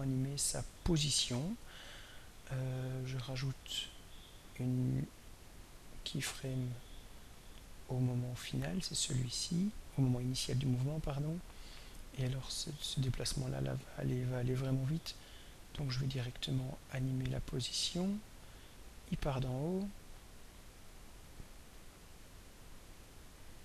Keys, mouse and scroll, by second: 5.2 click, 6.4 click, 20.6-23.6 drag.